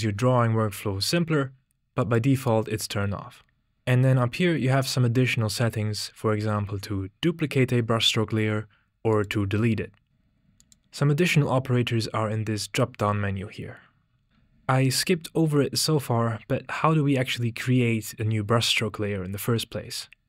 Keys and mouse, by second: 2.2 click, 9.1 click, 10.5-14.3 drag, 14.3 ctrl+z.